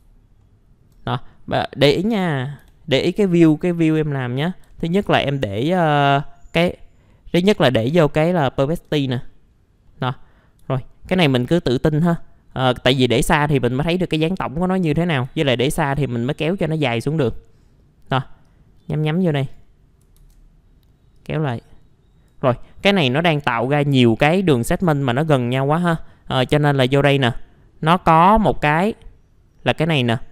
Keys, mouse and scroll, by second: 0.1 alt+scroll down 1, 1.0 scroll down 1, 1.3 middle click, 3.0-4.0 scroll down 1, 4.0 middle click, 5.1 ctrl+alt+middle click, 8.5 alt+middle click, 9.0-9.5 scroll up 1, 9.5-9.9 scroll down 1, 9.9 middle click, 10.6 alt+middle click, 11.4 scroll down 1, 11.9 scroll up 1, 12.2 middle click, 14.7-15.2 scroll down 1, 15.2 scroll up 1, 15.7-16.2 scroll down 1, 16.5 middle click, 18.4 click, 21.1 click, 22.7-24.5 scroll up 1, 24.7 ctrl+z, 26.4 click.